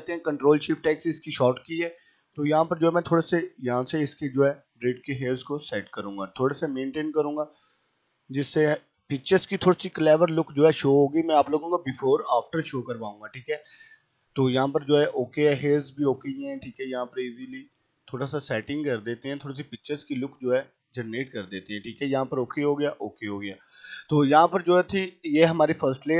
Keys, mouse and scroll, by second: 2.5 ], 3.6-5.1 drag, 5.9 [, 6.7-8.3 drag, 8.3-9.0 typing, 9.4-11.1 drag, 11.1 ], 11.7 click, 12.6 ], 12.7 scroll up 1, 12.9 ], 13.3-13.7 scroll up 1, 13.7 ], 15.1-16.6 typing, 16.9-19.2 drag, 19.7 typing, 20.3 click, 21.5 ], 22.8 click, 25.0-26.1 drag.